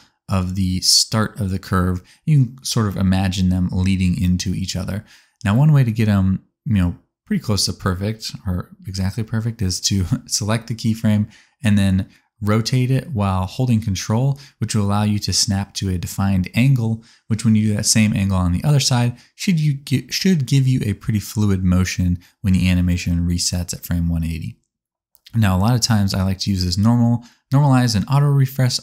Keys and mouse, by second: 12.2 click, 13.5 r, 13.7-17.9 ctrl+drag, 18.8 click, 19.2 r, 19.4-24.1 ctrl+drag.